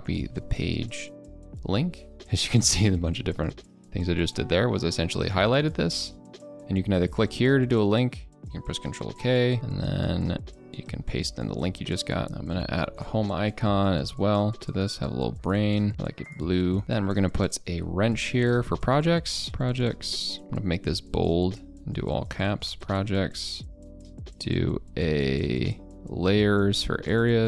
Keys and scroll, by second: 0.6 ctrl+a, 1.1 ctrl+k, 1.7 ctrl+v, 8.8 ctrl+k, 10.8 ctrl+v, 20.4 ctrl+b.